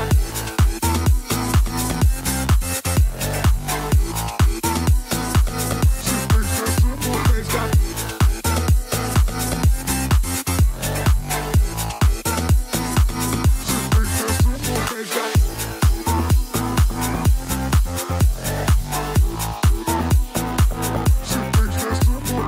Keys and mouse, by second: 0.5 shift+a, 1.8 click, 2.4 click, 2.5 click, 2.7 middle click, 3.0 click, 4.6 click, 5.0 middle click, 5.0 drag, 5.3-5.7 middle drag, 6.1 click, 6.4 middle drag, 6.7 middle drag, 7.2-7.7 drag, 7.9 click, 8.8 click, 9.8 drag, 10.3-10.6 drag, 11.3 middle click, 11.8-14.3 drag, 12.2 0, 13.6 0, 14.8 click, 16.6 shift+click, 17.2-18.5 drag, 19.0 click, 20.1 click, 20.8 click, 22.1 click.